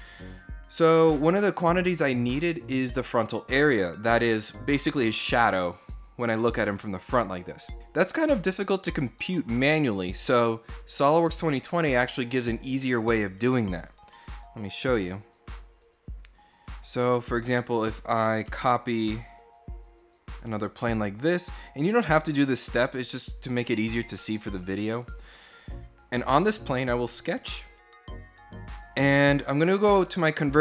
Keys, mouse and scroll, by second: 3.8-5.7 middle drag, 15.5 click, 16.4 click, 16.8 middle click, 17.4 scroll up 2, 18.8-20.1 ctrl+drag, 22.7 click, 24.2 middle click, 25.4 right click, 26.4 click.